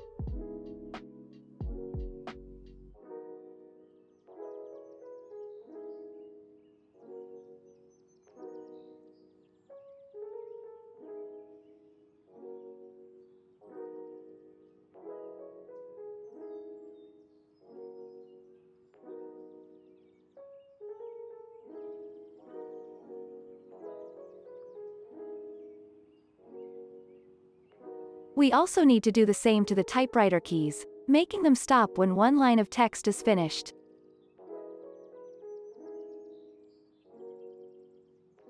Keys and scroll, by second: 0.7 space, 1.1 ctrl+s, 16.0 ctrl+c, 23.5 ctrl+s, 34.9 ctrl+s.